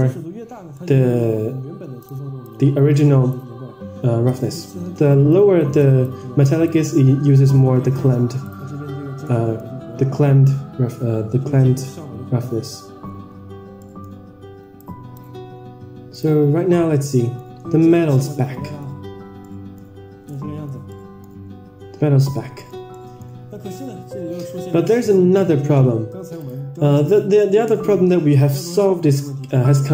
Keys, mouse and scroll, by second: 0.7 middle click, 1.9 click, 2.3-3.3 drag, 4.2 drag, 5.2 click, 5.7 click, 6.3 click, 8.7 click, 13.7 middle click, 14.7 click, 16.4 click, 16.9 scroll down 3, 17.1 middle drag, 17.5-18.1 scroll up 5, 17.9 middle click, 18.3-18.8 middle drag, 18.3 scroll down 1, 18.9-19.5 scroll up 3, 19.4 middle click, 20.1 scroll down 5, 20.2-20.6 middle drag, 20.8 middle click, 21.2-22.2 scroll up 4, 22.2-22.7 middle drag, 22.8-23.2 middle drag, 24.2 KP_0, 26.4 drag, 27.1 scroll up 2, 27.4 scroll down 1, 27.5-27.9 scroll down 3.